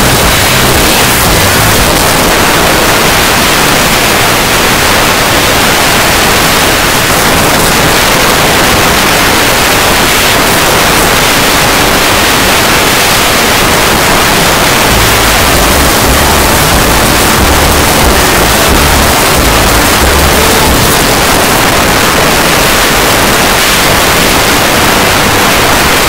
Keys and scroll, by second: 1.9 Page_Down, 20.9 Page_Down.